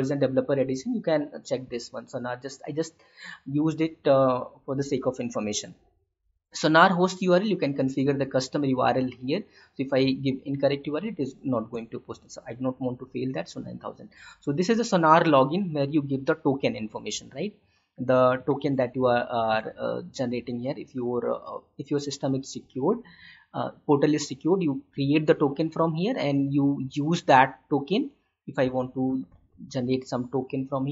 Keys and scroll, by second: 18.6 alt+Tab, 19.6 Tab, 20.4 alt+Tab.